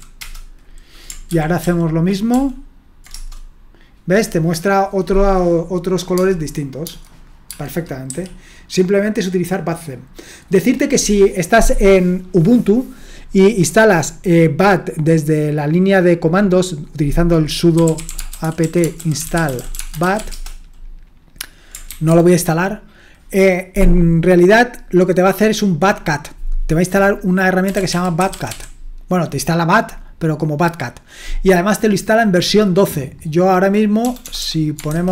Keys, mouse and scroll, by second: 0.0-0.4 typing, 1.3 ctrl+p, 1.6 ctrl+p, 2.3 ctrl+p, 3.1 Return, 6.1-6.8 typing, 8.1 typing, 10.5 click, 17.5-20.6 typing, 21.9 ctrl+c, 27.4-29.0 typing, 34.0-35.1 typing.